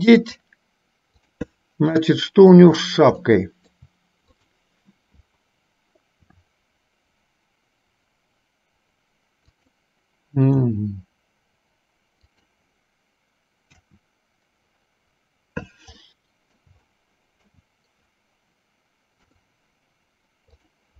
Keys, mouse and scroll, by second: 1.4 click, 2.3 shift+middle click, 3.4 shift+middle click, 4.5 click, 6.4 r, 10.7 g, 13.8 KP_1, 16.2 middle click, 17.0 shift+middle click, 19.3 KP_3.